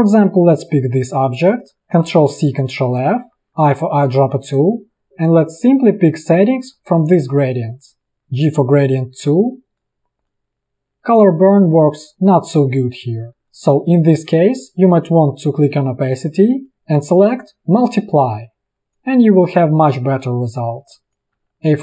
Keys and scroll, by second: 2.0 ctrl+c, 2.9 ctrl+f, 3.5 i, 8.1 g, 21.4 v, 21.5 a.